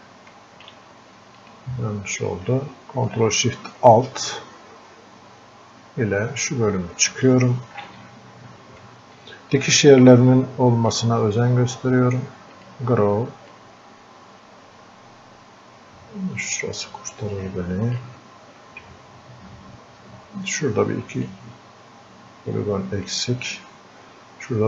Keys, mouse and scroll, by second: 1.4 ctrl+click, 3.1-8.0 ctrl+shift+drag, 8.0 ctrl+click, 9.2-21.3 drag, 21.3-23.5 drag, 23.5-24.6 drag.